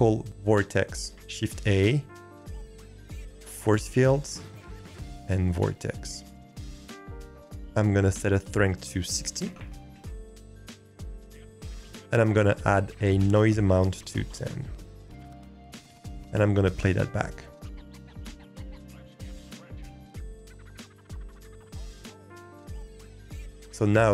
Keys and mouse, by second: 1.5 shift+a, 8.5-9.9 drag, 13.2-14.3 drag, 17.1 click.